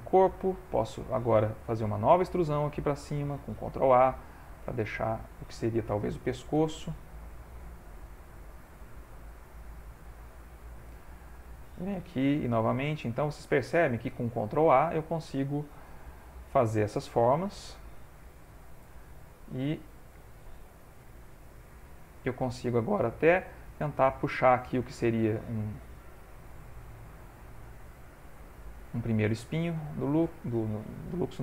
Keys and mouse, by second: 0.4 click, 1.9 e, 3.6 ctrl+a, 6.6 g, 9.6 e, 11.0 e, 12.0 ctrl+a, 14.1 e, 15.7 ctrl+a, 16.9 e, 18.6 ctrl+a, 20.1 e, 21.8 middle click, 23.7 g, 26.6 g, 29.1 ctrl+a, 29.1 click, 31.0 shift+middle click.